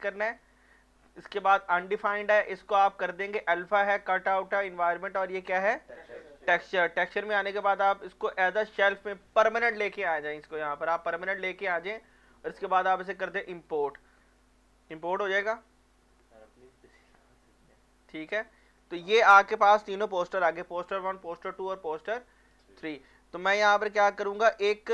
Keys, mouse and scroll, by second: 1.3 shift+click, 6.4 click, 10.4 click, 11.6 click, 13.7 click, 18.4-21.4 drag, 21.6 alt+Num_Lock, 21.6 click, 21.7-23.8 alt+drag.